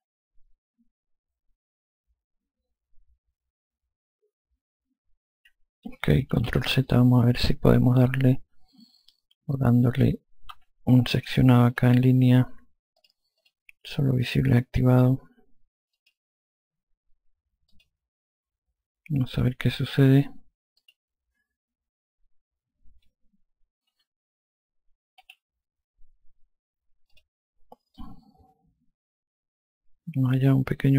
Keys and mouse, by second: 6.6 ctrl+z, 12.0 click, 13.3 click, 16.2 click, 18.0 click, 19.6 click, 21.1 click, 24.2 4, 25.5 3, 27.4 click.